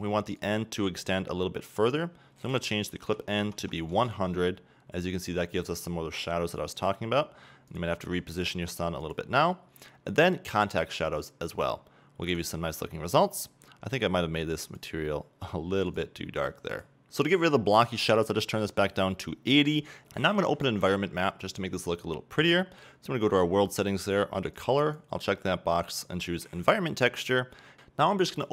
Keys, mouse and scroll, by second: 2.1 click, 3.0 click, 3.8 0, 4.3 KP_Enter, 4.6 click, 5.0 click, 5.2 scroll down 2, 5.3 click, 6.6 r, 7.9 click, 8.2 g, 9.4 click, 10.7 click, 12.7 right click, 16.0 click, 17.0 right click, 26.6-28.5 drag.